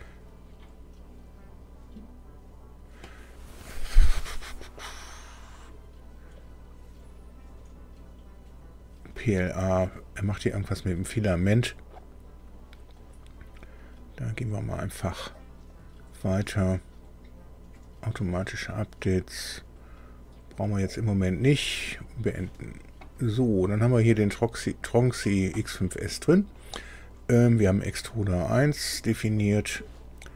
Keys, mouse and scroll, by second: 15.7 click, 21.5 click, 26.5 click.